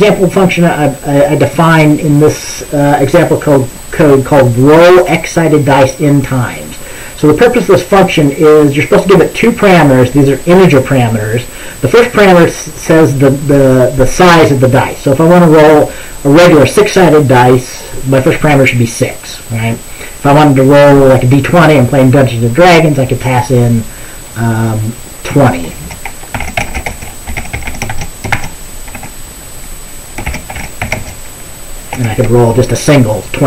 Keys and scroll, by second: 25.9 ctrl+s, 26.2-28.9 typing, 29.0 Tab, 30.1-32.7 typing.